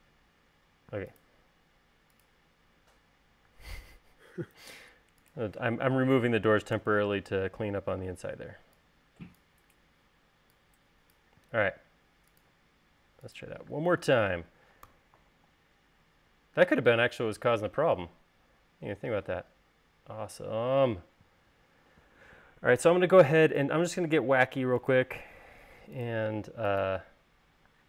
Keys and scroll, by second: 4.0 space, 7.3 BackSpace, 8.7 e, 12.0 l, 14.3 space, 15.4 u.